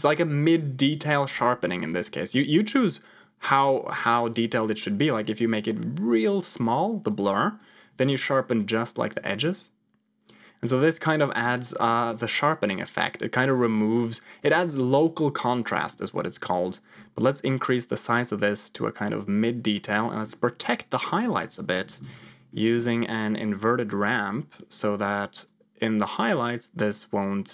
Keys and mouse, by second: 2.1 middle click, 3.1-7.6 shift+drag, 9.2 middle click, 10.3 click, 10.5-11.8 drag, 11.9-14.3 drag, 15.7 middle click, 16.6-19.7 drag, 20.0 middle click, 21.0-22.1 drag, 23.4 click, 24.2 click, 25.4 click, 26.9 click.